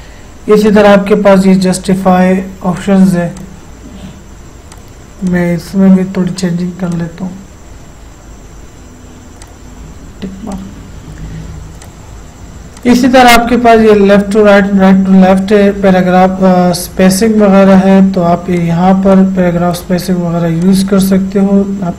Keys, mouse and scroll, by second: 0.7 click, 2.8-6.9 drag, 9.5 click, 17.7-20.6 drag.